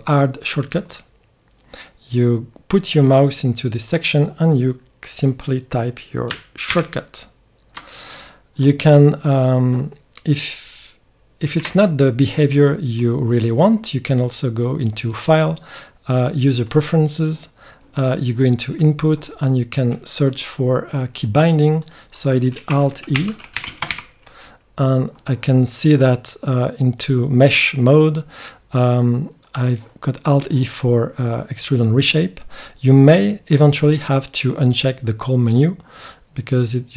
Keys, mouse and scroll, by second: 11.5 Escape, 12.5-14.8 middle drag, 16.8 click.